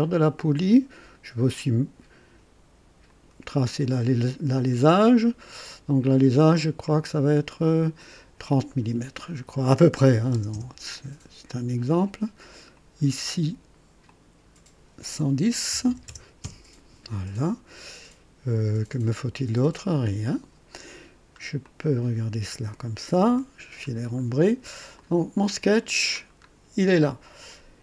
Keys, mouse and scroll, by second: 1.5 click, 3.0 click, 3.7 right click, 4.9 click, 7.0 click, 7.6 click, 10.1 KP_3, 10.3 KP_0, 10.5 Return, 12.5 click, 14.0 click, 15.7 KP_1, 16.0 KP_0, 16.4 KP_Enter, 17.5 typing, 20.3 click, 21.2 scroll down 1, 21.6-22.9 drag, 23.3 &, 23.8 scroll up 1, 24.9 click, 26.2 scroll down 1.